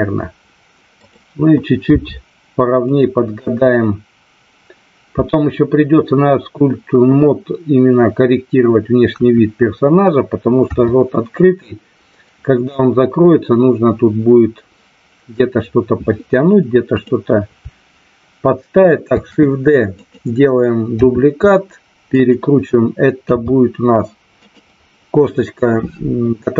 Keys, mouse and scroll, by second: 1.8 g, 2.8 click, 9.1 KP_1, 10.6 KP_3, 16.8 click, 19.1 shift+d, 20.0 click, 21.0 r, 22.1 click, 23.3 g, 24.4 click.